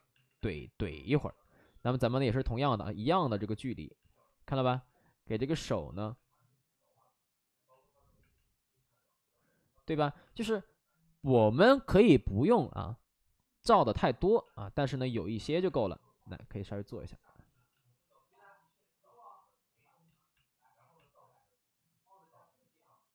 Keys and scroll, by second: 0.1 alt+s, 0.7 alt+s, 2.1 alt+s, 4.0 alt+s, 6.6 alt+s, 11.1 ctrl+z, 11.5 ctrl+z, 14.3 ctrl+z, 17.6 ctrl+z, 20.0 ctrl+z.